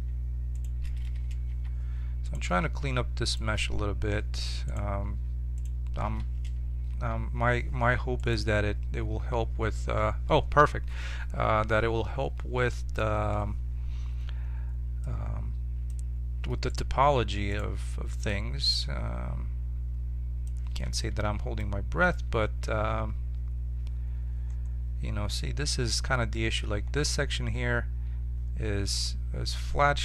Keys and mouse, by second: 1.5 j, 5.0-10.1 right drag, 6.9 j, 15.0-20.4 drag, 16.7-20.4 right drag, 20.8 middle click, 21.2 Tab.